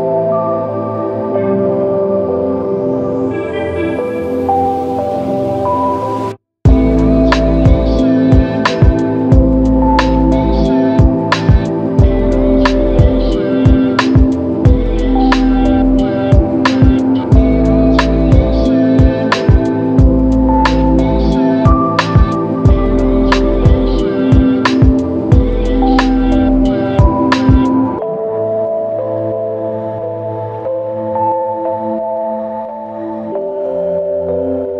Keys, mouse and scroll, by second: 8.6 alt+click, 11.9 alt+click, 14.1 ctrl+click, 23.9 typing, 25.0 ctrl+alt+click, 30.6 f, 32.7 typing, 34.1 double click.